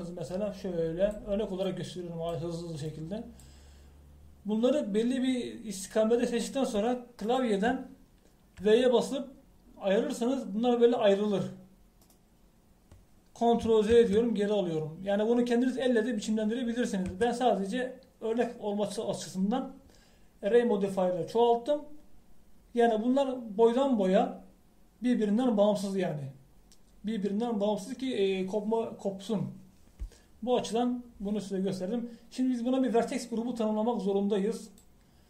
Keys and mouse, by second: 9.6 v, 15.0 ctrl+z, 18.1 a.